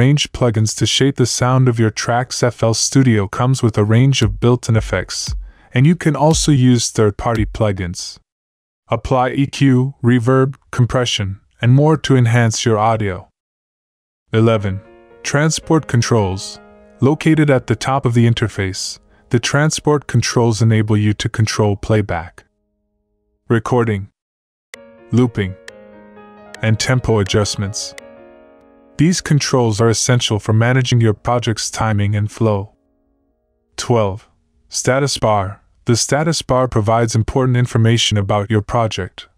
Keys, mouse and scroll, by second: 7.6 F1.